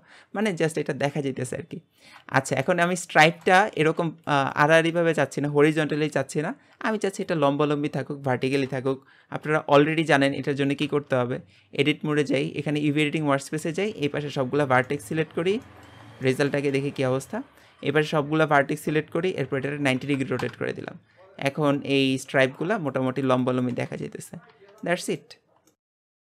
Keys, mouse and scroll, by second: 1.8-2.3 scroll up 1, 2.3 shift+middle click, 2.8 scroll down 2, 3.1-10.9 shift+middle drag, 10.9 Tab, 12.1 click, 13.6 a, 14.9 shift+middle click, 15.3 scroll down 6, 15.7-19.5 shift+middle drag, 19.5 r, 21.6 scroll up 1, 24.1 scroll down 4, 24.4 Tab, 24.8-26.3 middle drag.